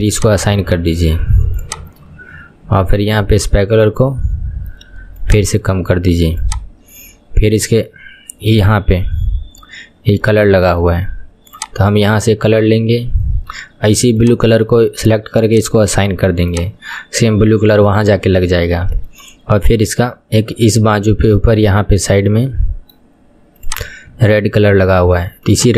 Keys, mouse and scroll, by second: 0.2-1.8 drag, 5.4-6.5 shift+drag, 11.8 click, 14.4 click, 15.7 click, 17.5-17.9 scroll down 2, 17.9-18.9 shift+middle drag, 18.9-19.2 scroll up 1, 19.2-23.8 shift+middle drag, 23.8 click, 24.2 KP_1, 25.6 click.